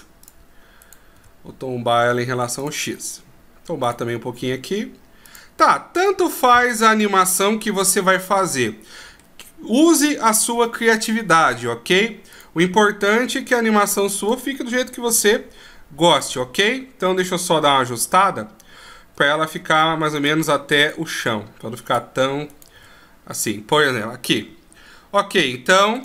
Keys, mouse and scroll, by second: 1.1 right click, 1.4 r, 4.1 right click, 4.7 r, 6.3 middle click, 9.7 scroll down 2, 12.6 right click, 13.2 scroll down 1, 14.5 right click, 15.3 r, 17.5 KP_1, 18.0-18.5 scroll up 1, 18.5 scroll down 1, 19.8 r, 21.0 right click, 21.4 r, 22.8 right click, 23.0 r.